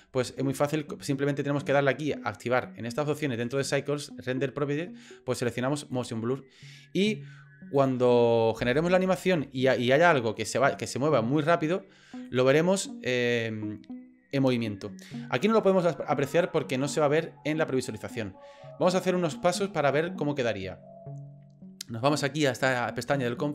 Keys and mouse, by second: 5.9 click, 7.8 click, 8.6 space, 12.2 click.